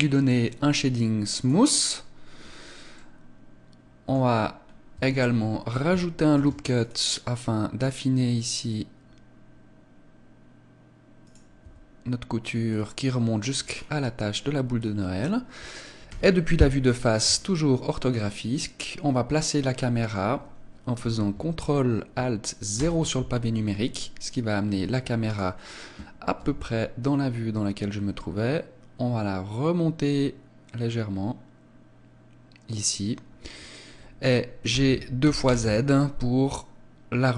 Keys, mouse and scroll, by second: 1.4 click, 2.5 scroll up 4, 3.0 middle click, 4.2-4.7 scroll up 2, 5.0 Tab, 11.3 click, 11.7 Tab, 12.7 middle click, 13.6 scroll down 7, 14.8 scroll down 2, 16.1 KP_1, 17.4 shift+middle click, 22.8 ctrl+alt+KP_0, 25.4 right click, 26.4 g, 32.8 click, 34.7 g.